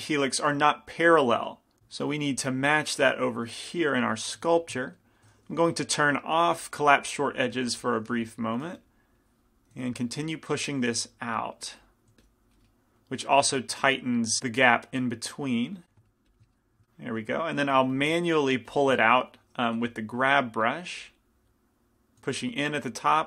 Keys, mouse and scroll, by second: 2.2 middle click, 4.1 i, 4.6 f, 5.9 t, 7.3 click, 8.8 f, 9.9 f, 12.3 f, 12.8-14.4 drag, 14.8-17.8 drag, 15.9-17.8 middle drag, 17.8 g, 17.9 f, 18.9-20.9 drag, 18.9-20.4 middle drag, 20.0 f, 21.2-23.2 drag, 22.4 f.